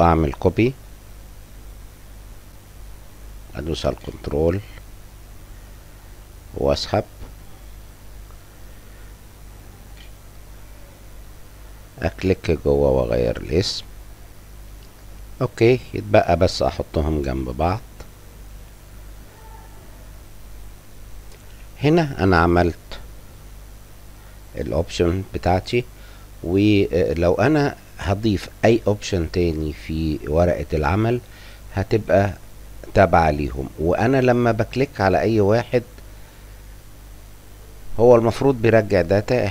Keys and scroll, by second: 4.9-6.8 typing, 11.9 5, 12.6 a.